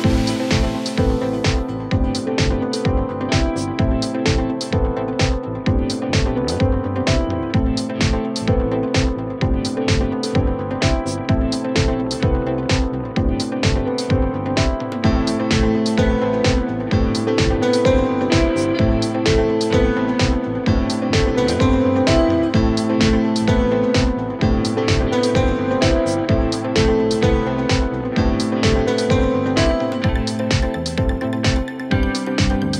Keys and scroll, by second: 0.2 Return, 1.3-3.4 typing, 18.0-19.5 typing, 20.6-30.4 typing, 32.0-32.7 typing.